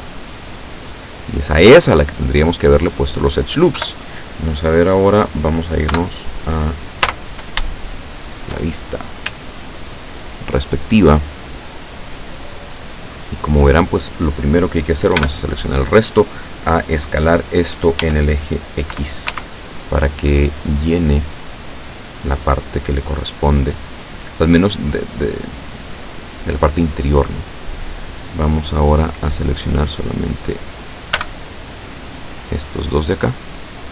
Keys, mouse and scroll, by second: 3.8 KP_7, 5.9 KP_7, 7.1 z, 7.9 shift+click, 8.8-9.3 shift+scroll up 3, 9.5-11.3 shift+drag, 15.2 l, 18.0 s, 19.4 x, 22.4 click, 23.4-25.2 drag, 30.0 right click, 31.2 b, 32.2-33.6 drag.